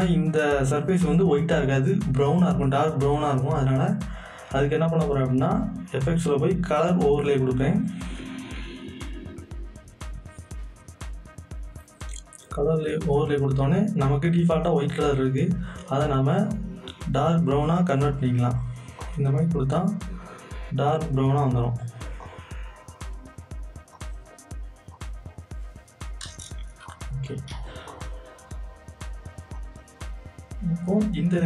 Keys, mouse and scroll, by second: 2.5 click, 5.9 click, 5.9 click, 15.1 click, 15.1-22.1 drag, 22.2 click, 23.9 click, 27.3 click, 27.3 z, 27.5 right click, 28.0 click.